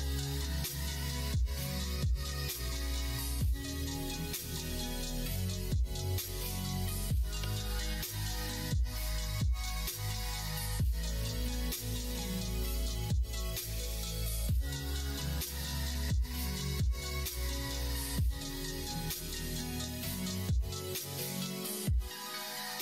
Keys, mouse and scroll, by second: 0.2 alt+click, 1.6 ctrl+b, 7.9 alt+click, 10.9 ctrl+b, 15.0 click, 16.2 middle click, 16.8 ctrl+b, 21.7-22.8 middle drag.